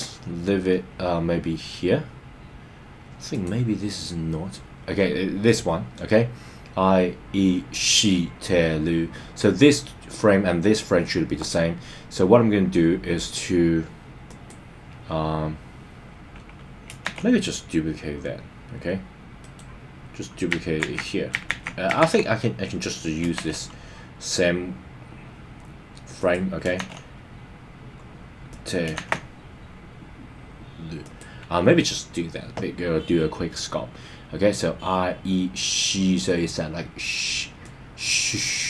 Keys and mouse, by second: 3.3 click, 14.3 click, 17.0 shift+d, 19.4 right click, 20.8 super+z, 21.5 super+z, 22.0 super+z, 23.3 shift+d, 26.2 click, 26.8 shift+d, 28.5 click, 28.9 shift+d, 31.0 click, 37.6-38.6 drag.